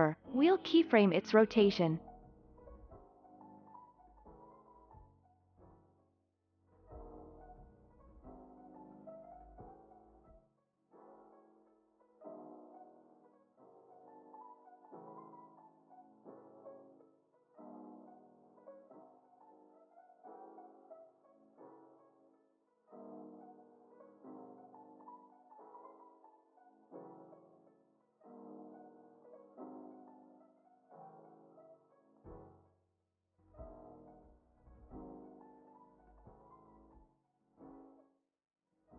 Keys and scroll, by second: 8.7 alt+x, 11.6 w, 15.5 z, 18.0 F9, 22.7 z, 25.6 alt+x, 28.3 w, 31.8 alt+x, 34.3 ctrl+c, 34.9 ctrl+s, 38.3 ctrl+c.